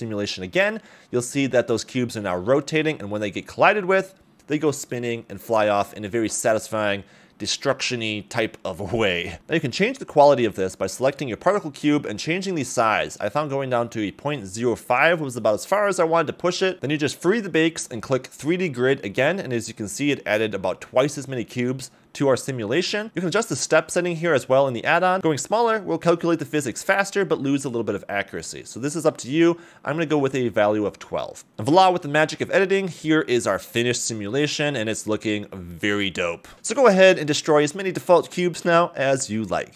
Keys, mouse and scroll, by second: 0.1 click, 0.6 click, 1.1 scroll up 1, 1.3 a, 1.4 a, 2.1 middle drag, 2.6 scroll down 1, 2.7 middle click, 3.3 scroll down 2, 3.5 middle click, 4.6 middle click, 4.9 scroll up 2, 5.3 middle click, 8.7 space, 9.0 click, 9.4 space, 9.9 scroll up 1, 10.1 click, 12.1-13.9 drag, 17.2 click, 18.3 click, 19.0-19.5 scroll up 2, 19.5 a, 19.7 a, 20.1-20.6 scroll up 3, 20.6 click, 21.4 scroll down 3, 21.9 a, 22.1 a, 23.8 click, 29.2 click, 31.5 click, 31.8-32.9 middle drag, 33.3 middle click, 34.6 middle click, 37.5-38.1 scroll down 2, 39.3 middle click, 39.7 m.